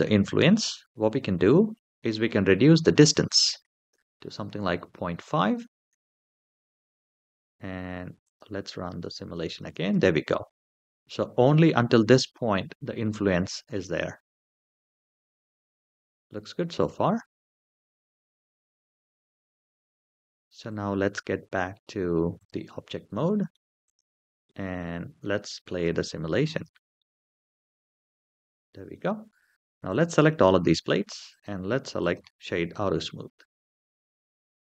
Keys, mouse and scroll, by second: 1.0-3.5 scroll down 3, 3.5-5.5 drag, 8.0 click, 8.6 space, 9.4 space, 15.5 click, 17.8-18.6 scroll up 4, 20.4-22.3 drag, 22.9-23.3 middle drag, 23.6 click, 24.2-24.5 middle drag, 25.6 space, 26.4 space, 26.7-28.7 middle drag, 29.6 click, 31.1-32.5 right drag, 32.5-33.1 middle drag.